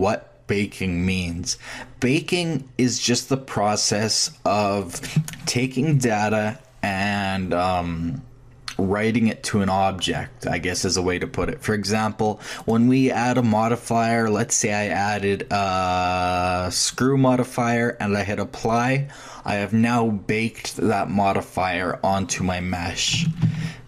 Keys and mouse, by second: 12.6-14.2 drag, 18.6 click, 23.4 ctrl+z.